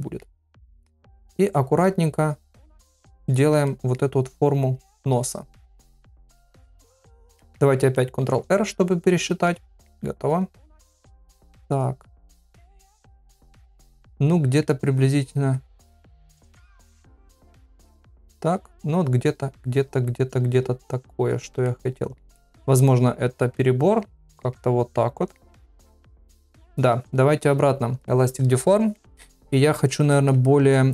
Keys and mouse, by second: 0.8 click, 1.6 click, 2.3 click, 2.8 click, 3.3 middle click, 3.7 middle click, 4.5 click, 4.9 click, 5.4 click, 5.7 middle click, 6.9 click, 7.4 middle click, 8.4 ctrl+r, 9.5 middle click, 10.5 click, 10.9 middle click, 11.9 click, 12.6 middle click, 13.3 middle click, 14.3 middle click, 15.3 click, 16.3 click, 16.9 middle click, 17.8 click, 18.6 click, 19.2 click, 19.8 click, 20.3 click, 21.1 click, 21.7 middle click, 22.7 click, 23.3 click, 23.5 middle click, 24.2 ctrl+middle click, 24.5 middle click, 25.5 middle click, 25.8 ctrl+middle click, 26.2 middle click, 28.0 click, 29.0 middle click, 29.4 middle click, 30.1 ctrl+middle click, 30.5 middle click.